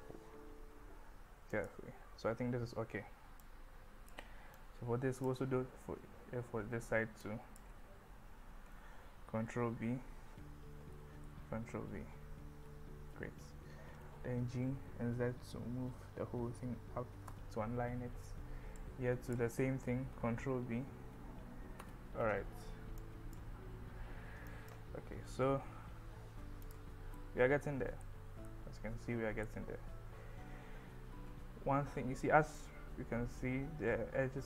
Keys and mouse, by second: 1.6 click, 3.5 click, 4.7 click, 7.3 click, 9.3 b, 11.3 b, 13.0 click, 14.0 g, 14.8 z, 17.3 click, 18.8 click, 20.1 ctrl+b, 21.8 click, 23.1 click, 24.5 click, 25.4 Tab, 26.7 click, 27.2 middle click, 28.5-29.5 middle drag, 31.7 KP_1, 32.6-34.4 middle drag.